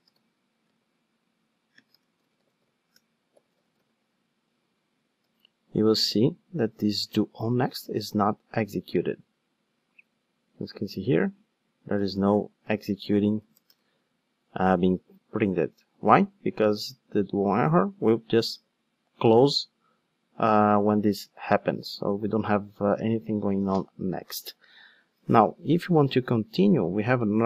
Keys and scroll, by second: 5.3 ctrl+shift+d, 12.0 super+c, 12.7 super+f, 12.8 super+v, 26.6 super+c.